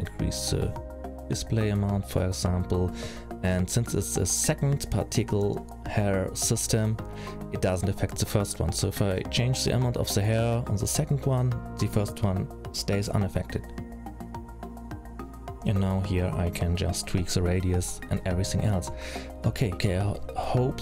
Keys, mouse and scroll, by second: 1.0-2.2 scroll up 2, 2.2-3.7 scroll up 13, 4.2 click, 6.5 click, 7.7 scroll down 4, 8.1-10.1 scroll up 4, 8.5 middle click, 10.1 middle click, 11.0 middle click, 11.8-13.2 scroll down 7, 13.2-14.0 scroll down 6, 14.8 click, 19.9 middle click.